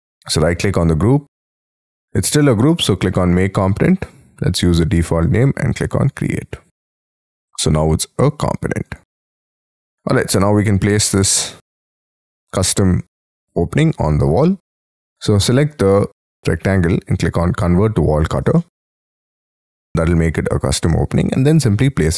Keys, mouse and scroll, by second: 9.0 right click, 9.2-10.3 scroll down 4, 10.3 middle click, 13.2 middle click, 14.4 middle click, 18.5 shift+middle click, 19.5-22.1 scroll up 11.